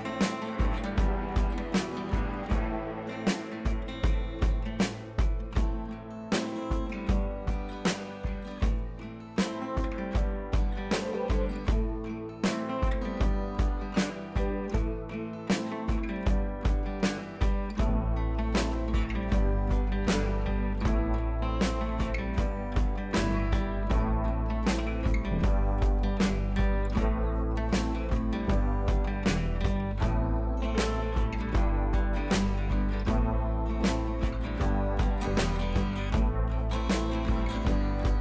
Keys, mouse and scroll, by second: 7.1 scroll up 1, 8.1 click, 9.7 b, 10.2-15.3 drag, 16.0 ], 16.1 ], 16.3-18.1 drag, 20.7 ctrl+z, 21.7 click, 22.9 ctrl+z, 23.8 click, 25.9 click, 29.0 click, 32.7 click, 34.7-38.2 drag.